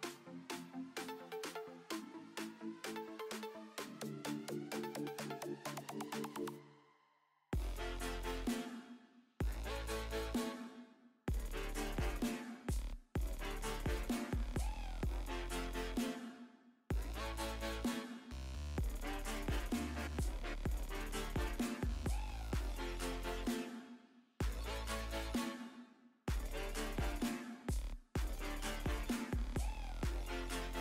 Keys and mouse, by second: 7.3 KP_1, 10.3 ctrl+s, 16.4 ctrl+s, 17.6 ctrl+s, 24.7 KP_5, 24.8 KP_3.